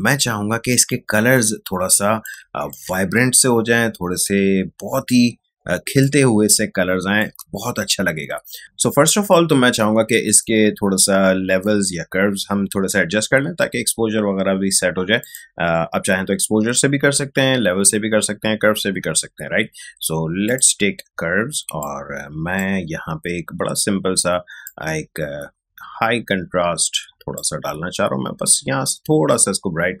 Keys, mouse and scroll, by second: 0.1 click, 0.3 space, 1.3-6.4 ctrl+drag, 6.4-8.6 ctrl+drag, 9.0 space, 9.3 click, 9.5 space, 15.2 click, 20.4-30.0 drag.